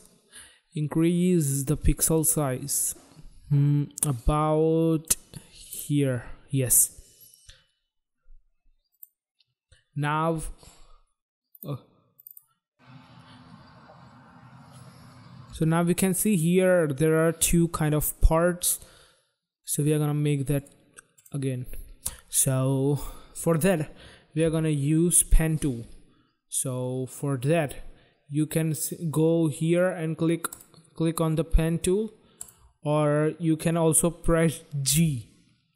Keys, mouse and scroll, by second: 5.7 click, 8.6 click, 11.5 click, 12.1 click, 12.2 click, 15.4 space, 19.6 click, 32.4 click, 34.8 g.